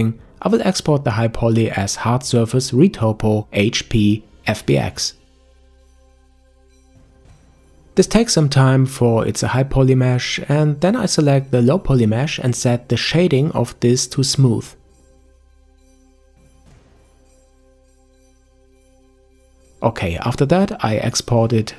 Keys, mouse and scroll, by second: 14.7 click, 17.6-21.7 right drag.